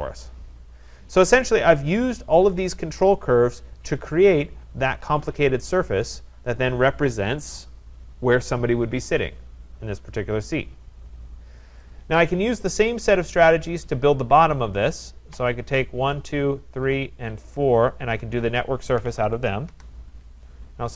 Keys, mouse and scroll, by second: 1.4 right click, 4.0 click, 6.6 right click, 11.2 scroll, 13.4 right click, 14.5 click, 16.2 shift+click, 17.0 click, 17.8 click, 18.7-19.7 typing, 19.7 Return.